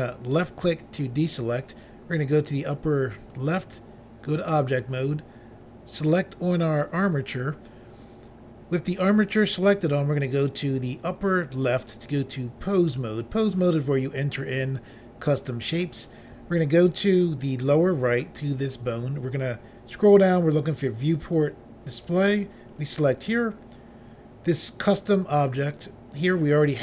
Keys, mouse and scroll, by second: 0.2 click, 0.3 click, 3.3 click, 3.5 click, 4.4 click, 4.5 click, 6.9 click, 7.0 click, 11.6 click, 11.8 click, 12.9 click, 13.0 click, 18.0 click, 18.1 click, 19.0-20.2 scroll down 3, 22.1 click, 22.8-24.0 scroll down 3.